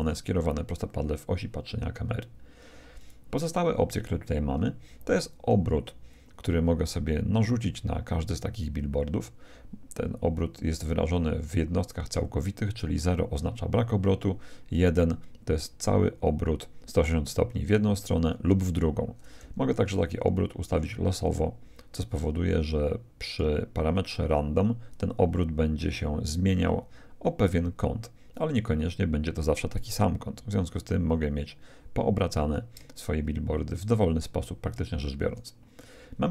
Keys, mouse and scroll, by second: 0.0 Escape, 3.0-4.7 drag, 6.1-7.9 drag, 15.1-16.7 drag, 20.9-22.5 drag, 24.9-26.7 drag, 34.2-36.0 drag.